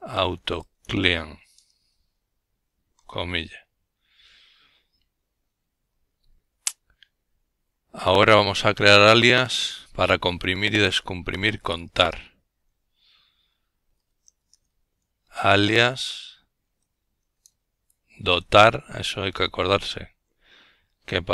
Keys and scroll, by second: 6.5 Return, 8.8-9.8 typing, 11.0-12.9 typing, 16.2 typing, 20.6-21.3 typing.